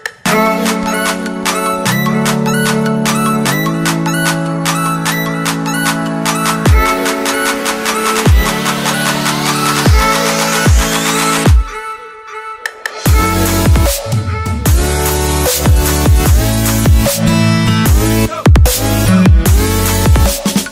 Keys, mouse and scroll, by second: 0.7 click, 4.1 Delete, 4.8 click, 7.0 ctrl+s, 12.9 click, 19.7 click.